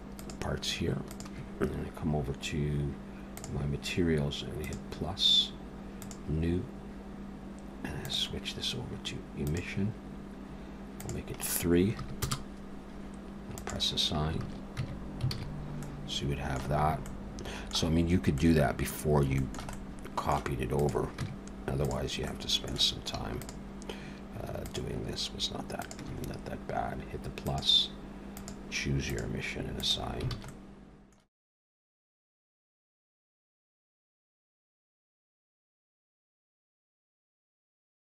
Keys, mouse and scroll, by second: 0.1 click, 1.1 shift+click, 3.3 click, 4.6 click, 6.0 click, 8.1 click, 11.0 click, 13.6 click, 14.4 alt+a, 14.8 Tab, 15.3 alt+a, 15.5-15.8 scroll down 3, 15.8 middle click, 16.8 scroll up 1, 17.1 middle click, 18.0-18.6 scroll up 2, 18.4 middle click, 19.0 scroll down 1, 19.4 shift+middle click, 19.7 middle click, 20.8 click, 21.2 Tab, 21.8 click, 22.3 middle click, 23.4 shift+click, 24.6 click, 25.8 shift+click, 27.5 click, 28.4 click, 29.8 click, 30.4 alt+a, 30.5 middle click, 31.3 Tab, 31.5 Tab, 31.5 click, 31.6 click, 31.8 shift+click, 32.1 shift+click, 32.3 shift+click, 32.6 click, 32.8 click, 33.2 click, 33.3 alt+a, 33.6 Tab, 33.6 middle click, 33.6 click, 33.8 Tab, 33.9 click, 34.1 shift+click, 34.3 shift+click, 34.5 shift+middle click, 34.8 shift+click, 35.2 click, 35.5 click, 35.7 click, 36.1 click, 36.2 alt+a, 36.3 middle click, 36.5 Tab, 36.6 middle click, 36.7 click, 36.8 Tab, 36.9 click, 37.2 shift+click, 37.4 shift+click, 37.7 shift+click, 37.9 click.